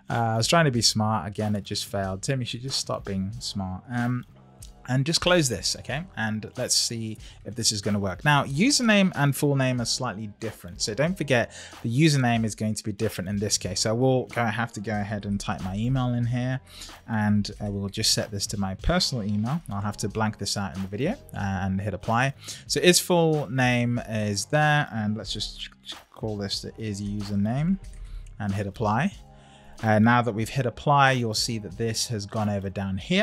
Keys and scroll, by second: 5.1 shift+0, 16.6 shift+2, 30.3 Up.